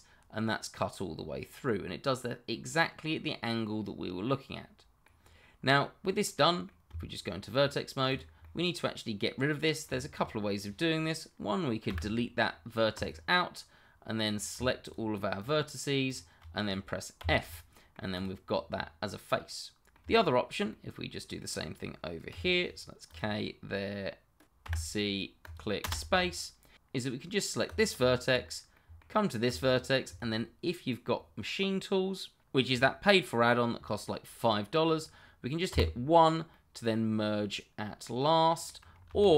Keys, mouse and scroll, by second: 5.2 scroll up 1, 6.2 middle click, 6.9 Tab, 8.1 click, 8.4 middle click, 12.9 click, 14.8 shift+click, 14.9 click, 16.0 shift+click, 17.2 f, 17.7 middle click, 18.2 click, 18.5 scroll down 1, 18.7 middle click, 22.3 k, 23.0 click, 24.6 c, 25.4 click, 25.8 space, 26.2 middle click, 27.5 scroll up 1, 27.7 click, 28.1 shift+middle click, 28.1 middle click, 28.3-28.7 scroll up 1, 28.7 middle click, 29.4 shift+click, 36.5 middle click, 39.1 ctrl+z.